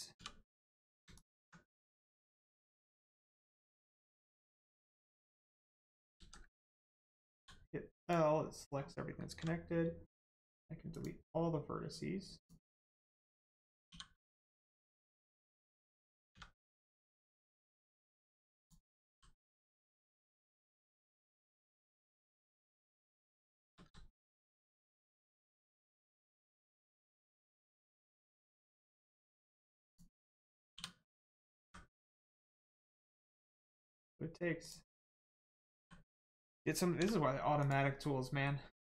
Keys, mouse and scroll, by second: 0.1 2, 0.5 click, 1.1 alt+click, 2.3 middle click, 3.9 shift+middle click, 5.3 shift+click, 6.1 ctrl+z, 7.3 z, 8.0 click, 9.3 x, 10.9 click, 16.9 click, 19.1 l, 20.0 scroll down 1, 20.9 shift+middle click, 21.4 scroll up 1, 22.5 shift+middle click, 23.8 middle click, 24.3 right click, 24.7 x, 25.2 click, 25.7 scroll down 1, 26.3 middle click, 26.7 scroll up 1, 27.5 shift+middle click, 29.8 click, 31.6 x, 32.3 click, 32.6 middle click, 34.6 click, 35.8 l, 36.9 x, 37.6 click, 38.0 middle click.